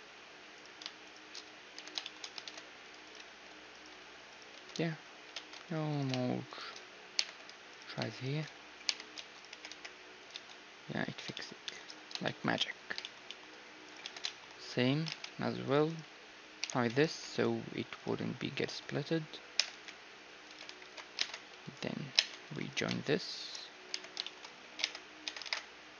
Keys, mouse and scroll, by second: 1.7 j, 2.0 click, 2.4 ctrl+Tab, 2.4 click, 2.9 middle click, 3.1 click, 3.1-5.8 right drag, 3.3 ctrl+x, 4.0 ctrl+x, 4.6 ctrl+x, 4.7-5.8 middle drag, 5.6 ctrl+Tab, 6.9-10.7 right drag, 7.1 j, 8.8 j, 9.1 a, 9.5 g, 10.3 Tab, 10.7-16.3 middle drag, 14.0 Tab, 14.0-15.7 drag, 14.0-15.7 right drag, 15.1 ctrl+Tab, 15.9 click, 15.9-17.9 right drag, 16.6 h, 17.0 ctrl+r, 19.5 g, 20.8 alt+h, 21.2 ctrl+Tab, 22.1 ctrl+Tab, 22.7-25.2 right drag, 23.9 j, 24.2-25.2 drag, 24.8 Tab, 25.2 Tab, 25.2-25.9 middle drag.